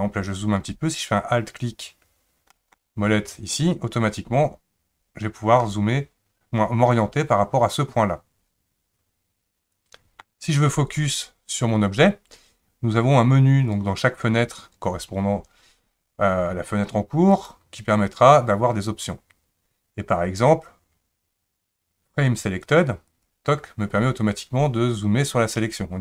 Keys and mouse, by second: 2.6 alt+middle click, 5.6-10.2 middle drag, 13.8 click, 17.3-23.3 drag.